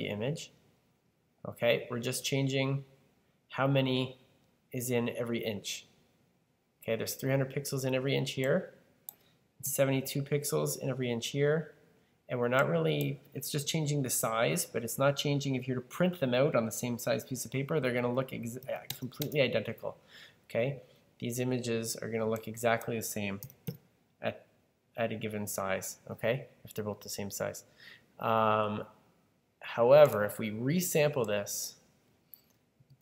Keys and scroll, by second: 9.5-10.2 typing, 18.3-19.6 typing, 23.3 typing, 32.4-33.0 typing.